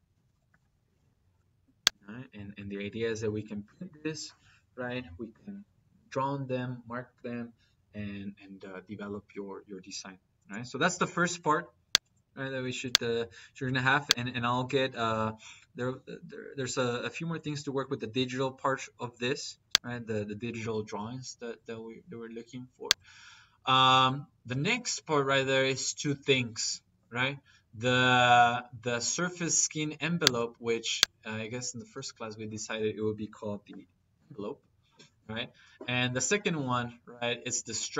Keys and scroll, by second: 0.0-0.9 typing.